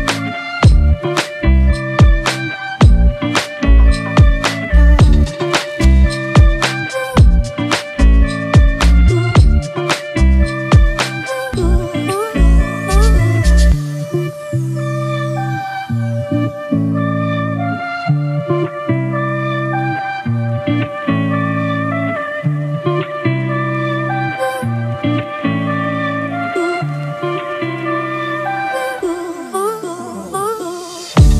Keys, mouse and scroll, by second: 4.0 alt+shift+click, 23.8 Return.